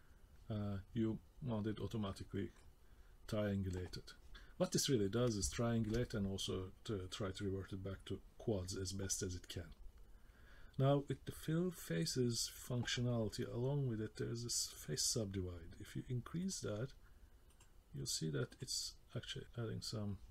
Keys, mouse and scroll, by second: 2.1 middle click, 5.5 shift+middle click, 6.0 middle click, 6.6-7.1 scroll up 2, 7.1 middle click, 7.9-8.6 scroll down 1, 16.4 click, 17.5 click, 18.5 click.